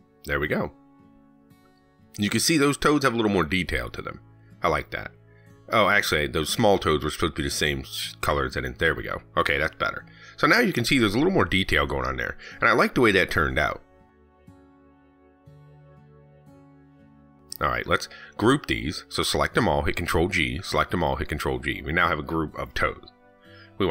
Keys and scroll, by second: 3.6 ctrl+s, 11.3 ctrl+s, 20.6 ctrl+g.